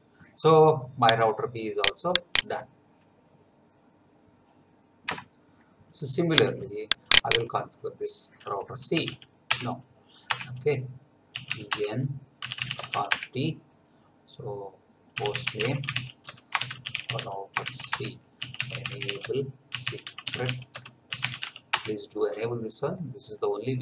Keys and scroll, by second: 5.1 F9, 8.9 n, 9.4 Return, 11.0-13.3 typing, 14.9-21.9 typing, 17.9 Return.